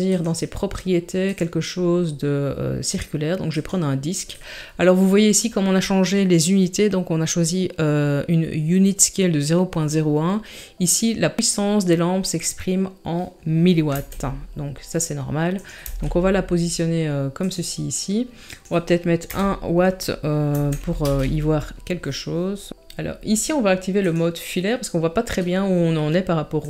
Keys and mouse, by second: 0.1 click, 1.3-3.6 drag, 14.0 s, 15.8 g, 18.5-21.1 drag, 24.1 click.